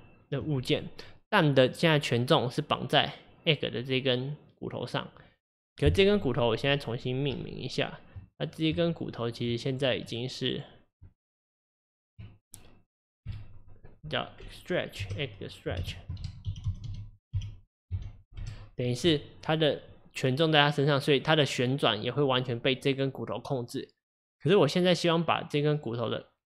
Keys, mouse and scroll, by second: 0.8 click, 1.8 click, 7.4 Tab, 8.8 Tab, 9.7 click, 10.1 click, 10.6 click, 11.1 Tab, 13.3 F2, 22.0 click.